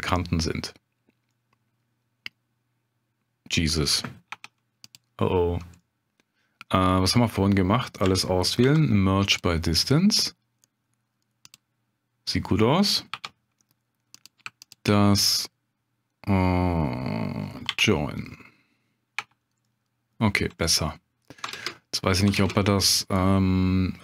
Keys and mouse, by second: 0.4-1.0 middle drag, 1.3-3.6 middle drag, 4.3 Tab, 5.8 click, 8.0 a, 8.6 m, 13.1 1, 14.1 click, 14.6 shift+click, 17.7 j, 19.2 Tab, 19.6-20.1 drag, 20.6 middle drag, 21.5 ctrl+space, 22.4 ctrl+space.